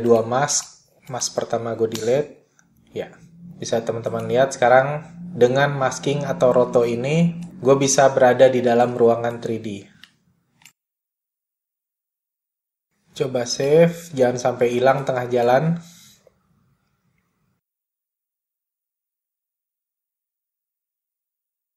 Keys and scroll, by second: 0.5 BackSpace, 9.2-10.1 typing, 13.3 super+s, 18.7-20.4 typing.